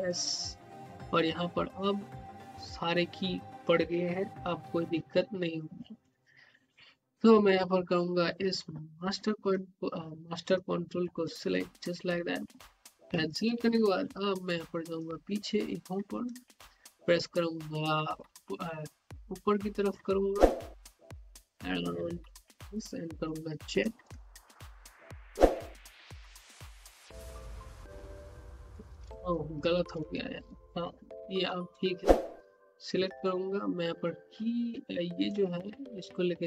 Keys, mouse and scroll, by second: 7.4-10.4 drag, 10.4-12.6 drag, 12.6 alt+middle click, 13.0 scroll down 1, 13.3 alt+click, 13.5 scroll up 1, 13.8 alt+middle click, 14.9-19.4 drag, 19.4 z, 19.8-23.6 drag, 23.6-28.1 typing, 29.6 ctrl+z, 31.4-31.9 scroll up 1, 32.0 alt+middle click, 32.7 click, 35.2-36.4 drag.